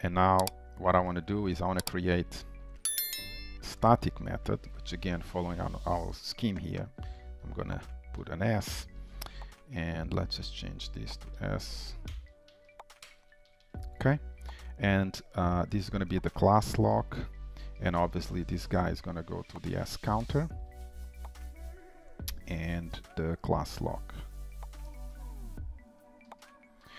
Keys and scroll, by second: 0.4 ctrl+d, 1.3 shift+Return, 12.1 Delete, 16.0 ctrl+shift+Right, 19.0 ctrl+w, 20.2 Return, 21.8 ctrl+s, 24.2 ctrl+shift+Right, 26.8 ctrl+s.